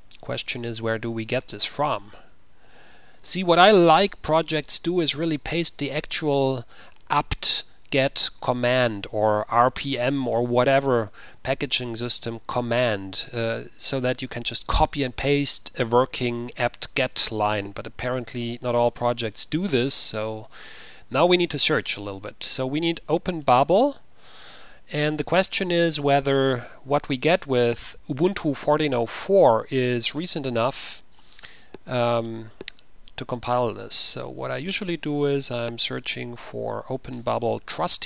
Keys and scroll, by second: 25.5 ctrl+c, 30.8 ctrl+t, 31.4 ctrl+v, 33.7-36.7 typing, 37.4 Return.